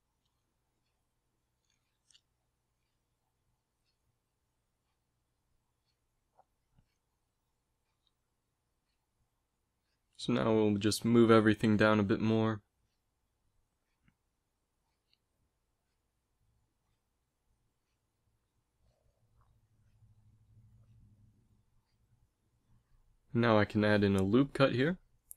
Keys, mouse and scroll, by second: 0.2 z, 0.5 z, 1.7 z, 8.8 KP_1, 9.4 z, 10.2 b, 11.0 g, 12.6 a, 12.8 z, 14.1 ctrl+s, 24.3 ctrl+r.